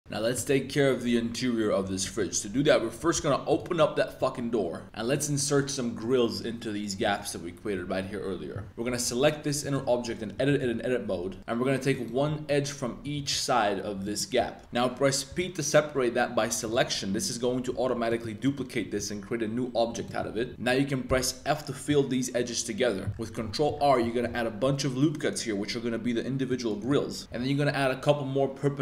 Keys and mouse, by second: 2.0 r, 2.2 z, 3.0 9, 3.1 0, 3.7-4.2 middle drag, 4.3-4.8 middle drag, 5.1 middle click, 7.0 shift+middle click, 8.7 Tab, 9.0 g, 10.0 Tab, 10.3 2, 10.4 middle click, 11.4 2, 11.9 click, 12.4 shift+middle click, 14.0 shift+click, 15.3 p, 17.7 Tab, 18.1 click, 18.4 click, 18.9 g, 20.2 Tab, 20.5 1, 20.5 middle click, 20.5 a, 21.0 f, 23.1 super+r, 26.8 click, 27.2 super+r.